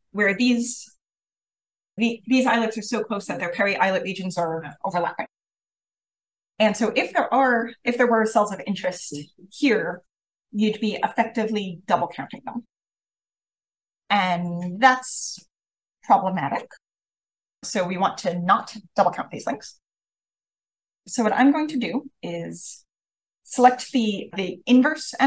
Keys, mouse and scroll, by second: 21.2 click, 23.4 click.